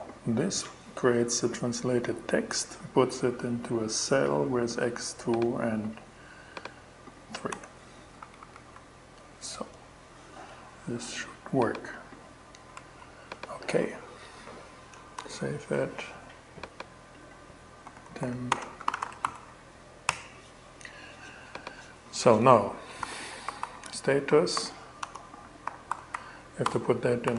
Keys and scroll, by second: 6.9 BackSpace, 7.6 Right, 8.2 Return, 12.2 shift+Return, 14.6 super+s, 17.1-19.2 typing, 19.5 Return, 22.4-25.8 typing, 26.7 alt+shift+d, 26.9 shift+y.